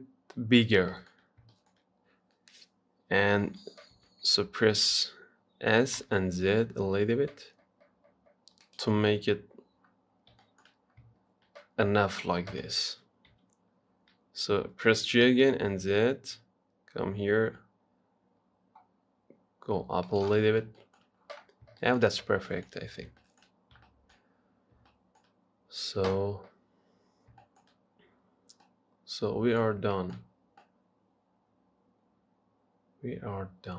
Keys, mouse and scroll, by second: 0.8-1.2 scroll up 1, 1.2 shift+middle click, 1.5 scroll up 1, 1.7-4.2 shift+middle drag, 4.2 s, 9.8-10.4 scroll down 6, 10.4 scroll up 1, 10.6 shift+middle click, 10.9 scroll up 1, 11.1-12.0 scroll down 3, 12.0-12.6 scroll up 1, 12.6 scroll up 1, 12.8 shift+middle click, 13.5 g, 20.7-21.0 scroll down 4, 21.0 shift+middle click, 21.7-22.0 scroll up 4, 22.0-23.8 shift+middle drag, 23.8 scroll down 1, 24.1-26.9 shift+middle drag, 26.9-27.3 scroll up 1, 27.3-27.6 scroll down 1, 27.6-29.9 shift+middle drag, 29.9 scroll up 2, 30.2 shift+middle click, 30.5-30.8 scroll up 1, 30.8-33.7 middle drag.